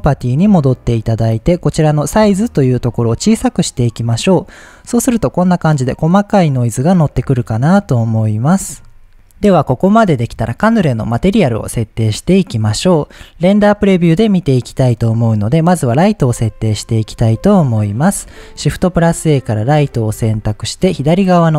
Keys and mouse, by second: 3.2-8.2 drag, 8.7 shift+click, 14.0-16.2 drag, 16.2 KP_7, 17.5 shift+middle drag, 18.1 shift+a, 20.2 g, 20.9 drag.